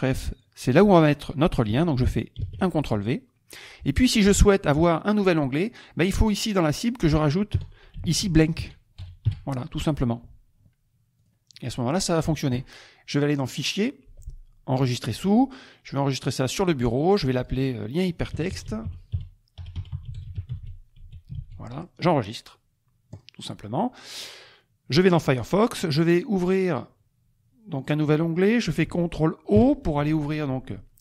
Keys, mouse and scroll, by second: 1.0 click, 2.4 ctrl+v, 3.5 click, 7.9-9.7 typing, 11.2 click, 11.5 middle click, 11.5 click, 13.5 click, 14.9 click, 17.4 click, 18.1-21.9 typing, 23.1 click, 25.0 click, 26.4 click, 27.7 click, 29.5 ctrl+o.